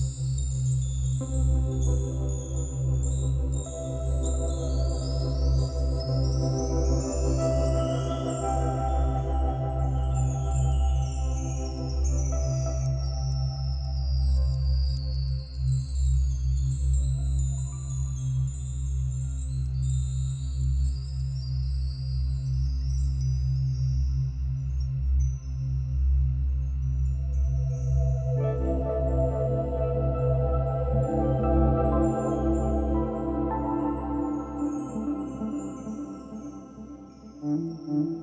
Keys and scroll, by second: 1.7 ctrl+z.